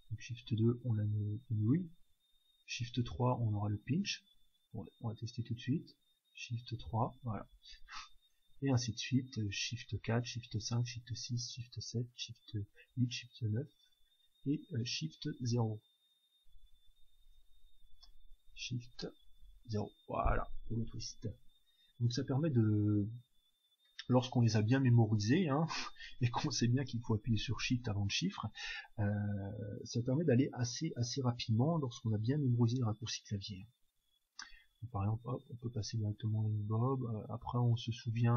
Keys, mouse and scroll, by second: 6.7 shift+3, 8.2-10.0 drag, 19.3 shift+0, 20.4-22.4 drag, 34.9 1, 35.9-37.8 drag.